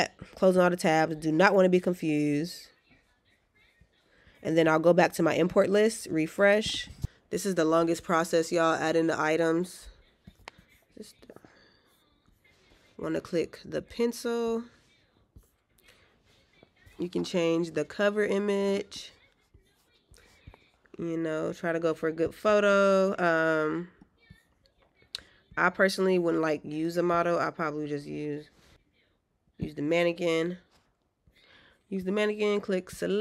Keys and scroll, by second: 3.9 alt+q.